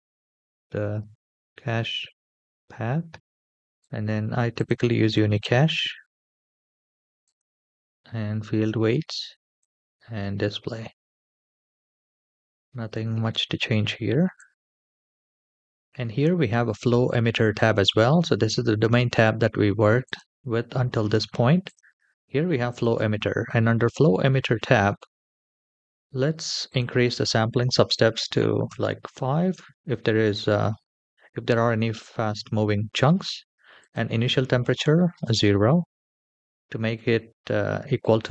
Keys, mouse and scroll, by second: 0.1 BackSpace, 0.2 BackSpace, 3.6-4.8 drag, 5.7-6.6 scroll down 2, 6.7-7.1 scroll up 3, 7.1 click, 9.5 click, 10.3-11.0 scroll down 2, 11.0-11.6 scroll down 1, 11.6-12.3 scroll down 1, 14.2 drag, 19.9 click, 21.5 click, 22.5 click, 23.4-25.5 scroll down 3, 26.4-28.7 drag, 33.5-35.2 drag.